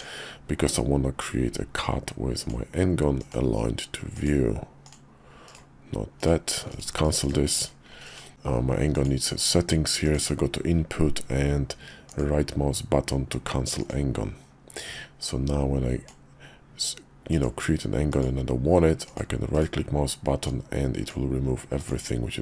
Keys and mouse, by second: 1.2-2.5 drag, 8.9-14.3 drag, 15.2 click, 20.4 click.